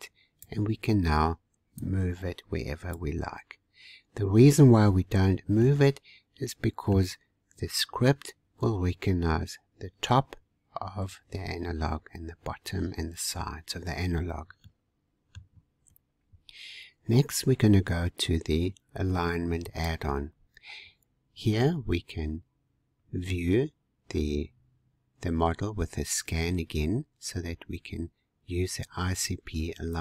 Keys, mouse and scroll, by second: 1.8 click, 3.6-5.6 scroll up 1, 5.6-8.7 middle drag, 13.6-14.7 scroll down 2, 14.7-17.7 middle drag, 19.7 click.